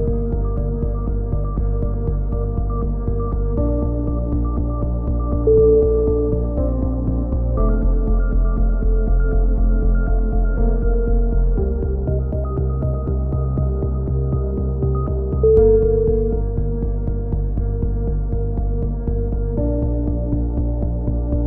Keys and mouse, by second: 0.3 Tab, 0.6-1.9 drag, 0.8 b, 3.7 c, 4.4 click, 5.4 a, 5.6 z, 5.9 z, 6.0 Tab, 6.2 z, 7.8 click, 7.9 ctrl+KP_1, 7.9 z, 9.5 KP_3, 10.3 Tab, 11.2-11.8 drag, 11.8 right click, 11.9 ctrl+KP_1, 13.4 KP_3, 14.5 a, 15.3-16.8 drag, 15.3 right click, 16.2 right click, 17.0 ctrl+KP_1, 17.4 a, 17.7 z, 19.9 ctrl+KP_1, 20.1 z, 21.0-21.4 right drag.